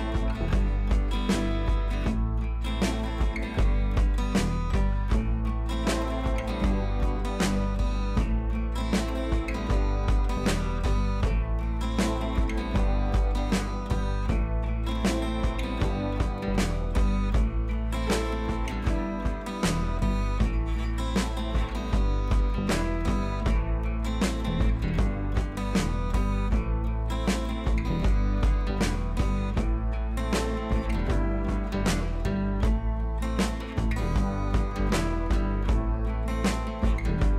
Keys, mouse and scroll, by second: 2.5 alt+click, 3.5 scroll up 1, 3.7 scroll down 1, 4.1 scroll up 1, 4.7 click, 5.5 scroll down 1, 6.5 click, 7.8-9.3 drag, 10.8 scroll down 1, 10.9 scroll up 1, 11.6 scroll down 1, 11.8-12.1 scroll up 1, 12.1-12.5 scroll down 1, 13.3 click, 15.1-15.7 scroll up 1, 15.7-16.2 click, 16.7 ctrl+t, 17.0-19.1 drag, 19.6 scroll up 1, 19.9 ctrl+t, 20.1 right click, 20.4 space, 20.6 scroll up 1, 20.8 click, 20.9 space, 21.1 click, 21.2 space, 21.6 right click, 22.1-23.6 drag, 28.7 scroll down 1, 29.4-30.1 drag, 31.9-32.7 scroll up 1, 32.7 click, 33.3 scroll up 1, 34.1-37.3 typing, 34.5 click, 35.1 click, 36.1 click, 36.9 click.